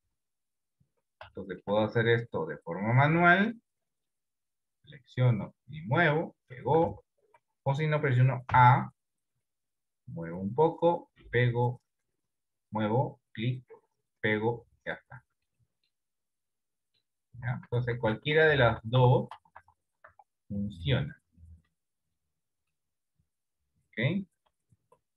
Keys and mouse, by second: 0.3 KP_7, 1.5 shift+middle click, 3.1 click, 4.1 click, 5.6 click, 6.9 ctrl+z, 8.7 a, 10.2-13.0 drag, 13.5-15.1 drag, 15.8 middle click, 16.7 middle click, 17.6 ctrl+z, 17.8 ctrl+z, 17.9 ctrl+z, 18.1 ctrl+z, 18.3 ctrl+z, 18.5 ctrl+z, 18.7 ctrl+z, 19.1 ctrl+z, 19.4 ctrl+z, 20.2 ctrl+z, 20.2 Tab, 20.6 middle click, 21.9 middle click, 24.4 Delete.